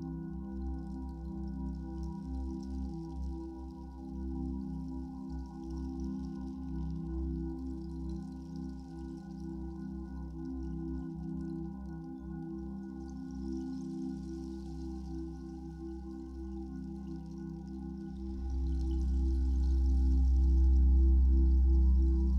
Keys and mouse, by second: 5.3-10.5 drag, 12.2-21.2 alt+drag.